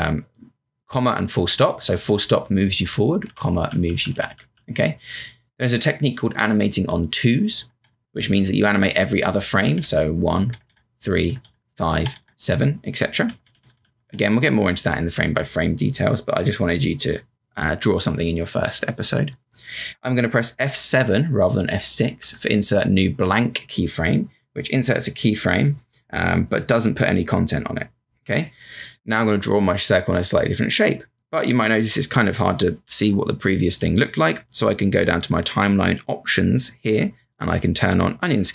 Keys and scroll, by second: 6.4 ., 8.3 typing, 11.6-13.7 typing, 16.5 typing, 22.2 F7, 33.6 b.